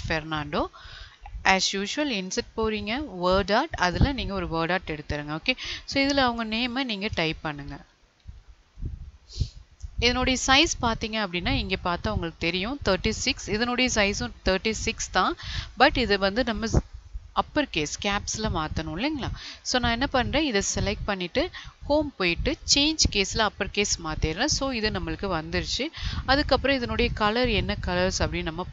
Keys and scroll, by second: 7.1 space.